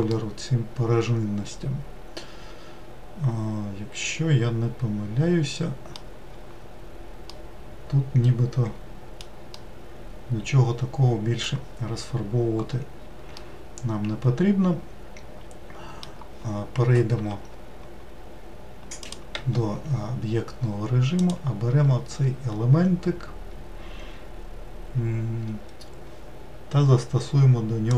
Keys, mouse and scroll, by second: 7.3-12.7 middle drag, 12.7-13.1 scroll down 1, 13.1-18.8 middle drag, 18.8 click, 19.1 Tab, 21.0 click.